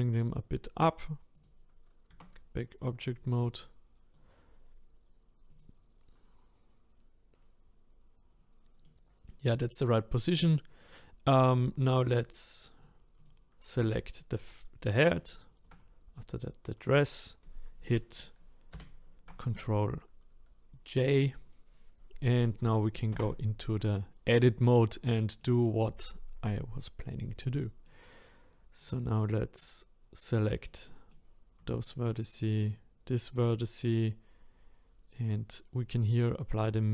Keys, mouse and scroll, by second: 1.4 click, 2.1 Tab, 3.2 click, 5.6 click, 6.2-7.3 scroll down 1, 7.3-8.3 scroll down 6, 8.3-8.8 scroll up 2, 8.8-10.5 middle drag, 10.5 click, 12.8 click, 15.3 ctrl+click, 18.7 ctrl+j, 23.1 Tab, 24.4-25.1 scroll up 1, 25.1-28.9 shift+middle drag, 28.9 click, 29.2-31.9 middle drag, 31.9 shift+click, 32.7-36.9 middle drag.